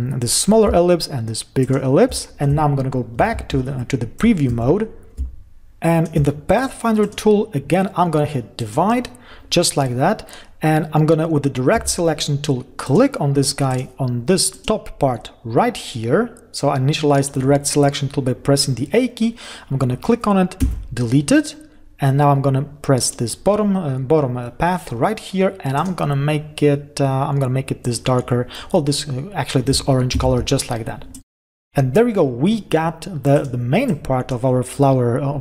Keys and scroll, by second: 3.3 ctrl+y, 5.0 ctrl+-, 21.2 Delete, 30.7 ctrl+0.